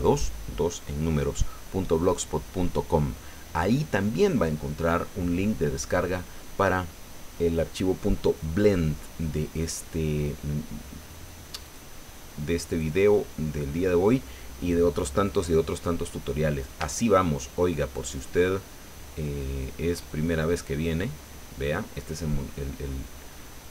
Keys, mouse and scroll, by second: 11.7 click, 12.7 click, 18.0 shift+click, 20.9-21.6 scroll down 2, 21.6-23.7 drag.